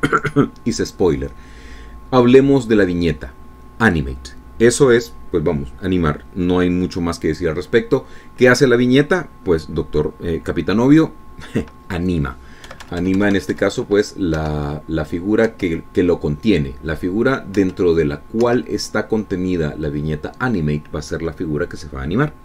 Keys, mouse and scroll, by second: 14.3 Right, 15.9 Up, 17.1 Down, 19.2 Up, 20.0 Down.